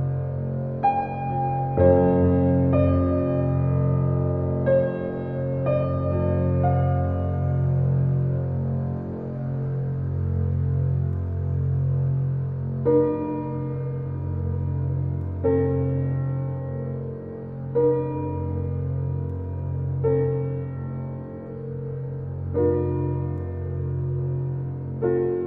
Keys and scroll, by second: 10.5 ctrl+z, 18.2 shift+space.